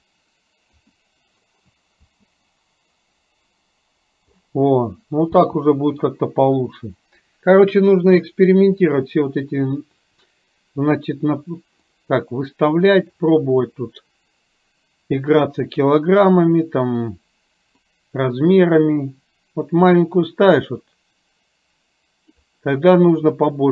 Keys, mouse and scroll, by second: 0.7 KP_0, 2.0 space, 5.5 space, 6.3-6.9 scroll down 1, 11.8 click, 18.0-22.3 drag.